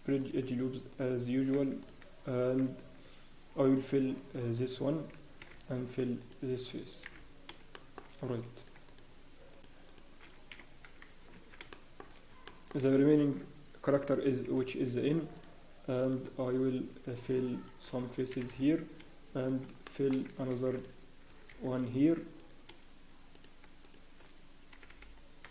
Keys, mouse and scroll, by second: 0.2 click, 0.8 right click, 3.7 click, 4.5 alt+click, 5.4 f, 6.2 alt+click, 7.0 f, 7.1 scroll, 7.7 scroll down 1, 8.6 click, 10.2 scroll down 3, 10.5 f, 10.8 scroll, 11.1 Tab, 11.2 scroll up 1, 11.3 Tab, 11.7 shift+middle click, 12.0 scroll, 12.4 shift+middle click, 12.9 scroll down 1, 13.0-14.5 scroll up 1, 14.9 ctrl+r, 16.5 scroll up 1, 17.2 click, 17.6 shift+click, 17.6 scroll up 1, 18.3 f, 19.8 shift+middle click, 23.3 click, 23.8 ctrl+r, 23.8 shift+click, 24.7 f, 25.3-25.5 scroll down 4.